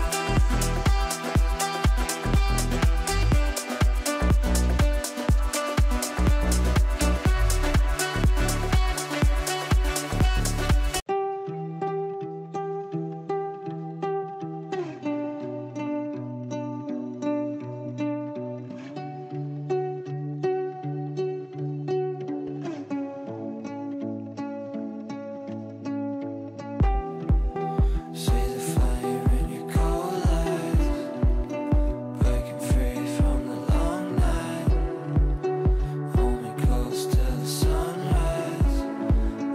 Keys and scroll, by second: 7.8 Down, 7.9 Right, 8.3 Down, 8.6 Right, 8.7 Down, 9.2 Left, 13.0 Right.